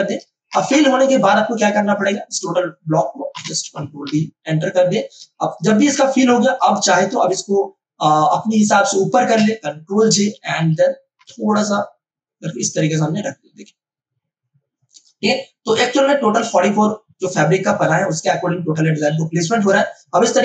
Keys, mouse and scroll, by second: 0.5 Return, 2.0 click, 3.3 Return, 4.0 ctrl+d, 5.3 space, 5.5-9.3 ctrl+drag, 10.0 ctrl+j, 10.3 ctrl+t, 11.2-20.2 drag, 20.2 Return.